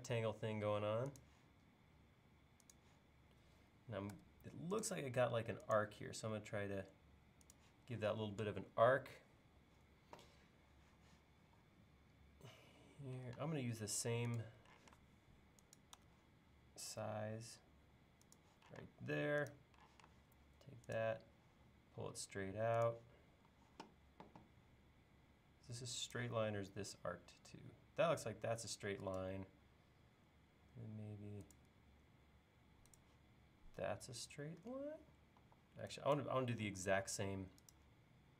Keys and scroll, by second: 4.1 a, 11.5 l, 13.4 space, 14.9 m, 18.9 space, 20.0 m, 23.5 l, 35.4 e, 36.5 l.